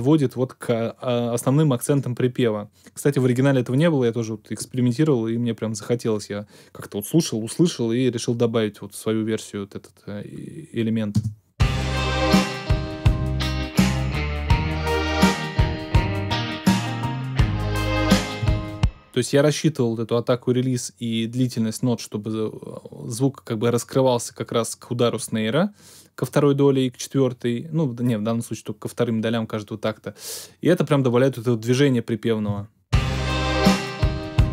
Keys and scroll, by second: 11.1 space, 18.4 space, 32.4 space.